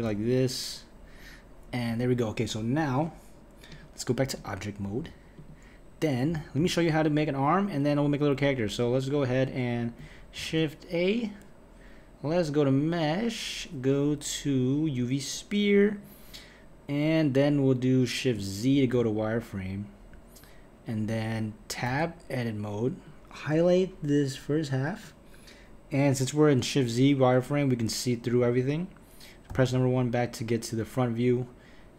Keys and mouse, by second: 0.0 g, 3.7-5.5 drag, 10.4 shift+a, 18.7 shift+z, 21.9 Tab, 23.0 click, 28.4 KP_1, 29.5 KP_1.